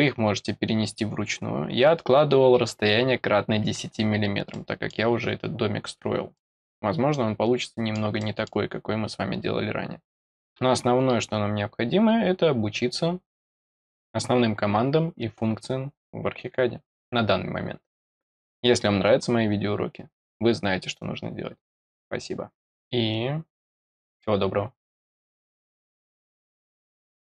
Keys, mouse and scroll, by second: 4.5 middle click, 5.2-5.6 scroll up 2, 6.3 middle click, 7.6 middle click, 8.1 middle click.